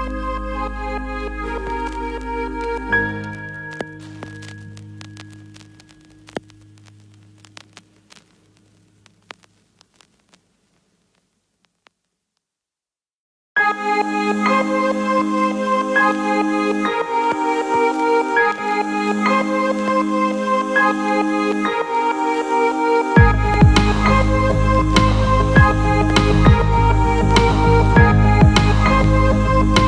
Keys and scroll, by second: 18.5 ctrl+t.